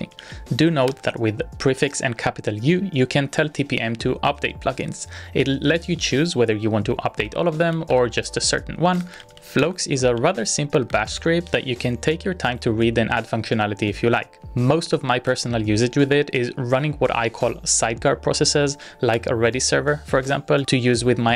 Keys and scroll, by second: 0.2 ctrl+a, 0.9 shift+u, 7.2-10.3 typing, 10.9 Up, 11.4 Return, 13.9 z, 15.2 ctrl+a, 15.5-16.7 typing, 18.7-19.4 typing.